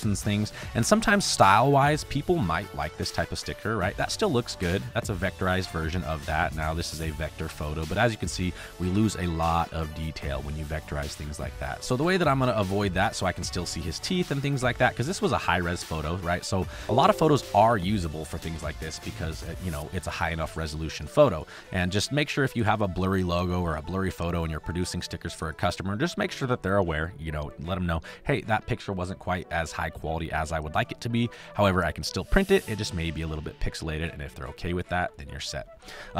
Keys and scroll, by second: 3.9 space, 11.1 space, 11.8 ctrl+b, 16.8 space, 20.0 space, 21.5 space, 23.0 space, 32.6 space, 35.0 space.